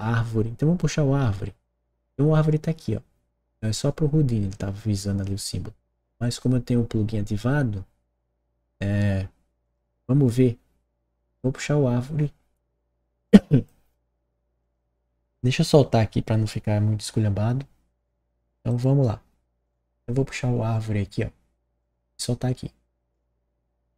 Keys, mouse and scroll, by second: 9.5 click, 13.4 click, 14.3 click.